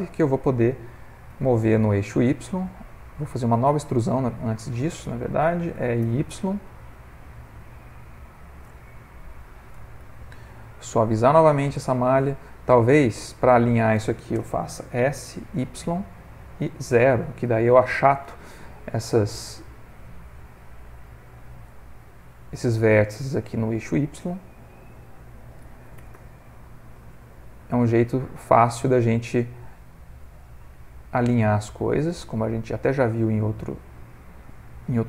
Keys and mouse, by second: 1.6 g, 6.4 e, 9.4 middle click, 10.0 ctrl+v, 12.3 middle click, 14.9 s, 18.9 middle click, 22.9 middle click, 24.2 middle click, 26.7 g, 29.7 middle click, 30.8 shift+middle click, 31.3 middle click, 33.2 middle click, 35.0 middle click.